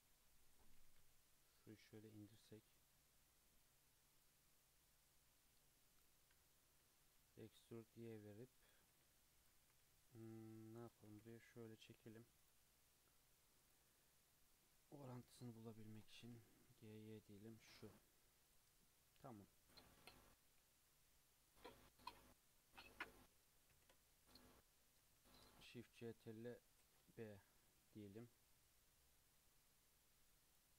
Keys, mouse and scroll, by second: 0.7 g, 2.5 2, 2.7 click, 4.8 click, 6.2 e, 9.1 click, 9.6 g, 10.5 click, 11.1 g, 13.6-14.8 drag, 16.1 g, 18.4 click, 19.5 click, 20.4 1, 21.6-23.7 drag, 23.7 ctrl+shift+v, 26.7 ctrl+shift+b.